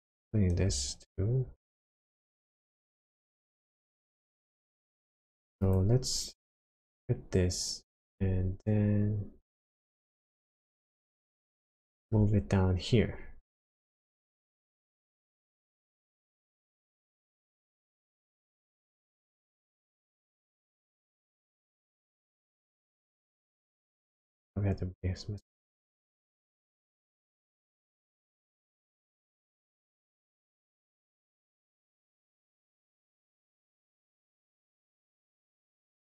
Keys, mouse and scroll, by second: 0.1 click, 1.5 shift+d, 2.7 click, 3.4 click, 5.7 ctrl+shift+click, 7.5-8.6 scroll up 7, 8.9-10.5 scroll down 9, 10.5-11.3 scroll up 7, 11.5 shift+middle click, 13.3 scroll down 1, 13.4-14.1 scroll up 7, 15.9 shift+click, 18.6 shift+click, 22.1 shift+click, 24.4 shift+click, 26.7 shift+click, 30.9 shift+click.